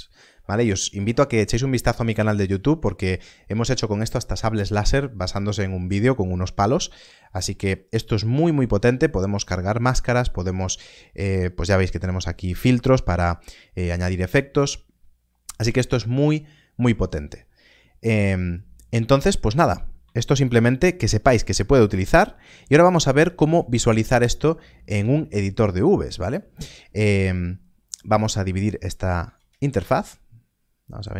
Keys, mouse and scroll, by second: 18.5 shift+a, 29.3 ctrl+space.